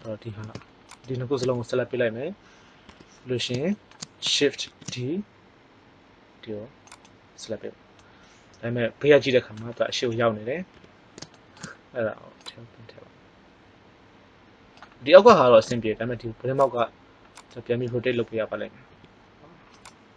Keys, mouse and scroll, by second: 0.9-2.8 right drag, 2.8 KP_1, 4.6 shift+d, 10.7 KP_3, 12.3-13.5 drag, 16.5-17.4 right drag, 18.8 r.